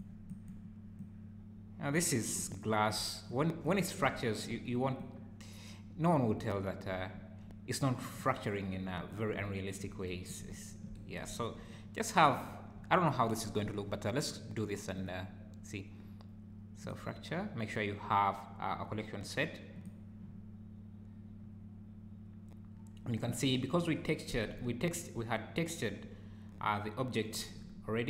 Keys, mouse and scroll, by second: 0.3 click, 1.0 click, 2.4 `, 3.3 click, 4.0 `, 5.0 click, 6.3 `, 7.1 `, 8.2 click, 9.4 `, 10.5 `, 11.3 `, 12.4 `, 14.9 click, 26.7 `, 27.6 `.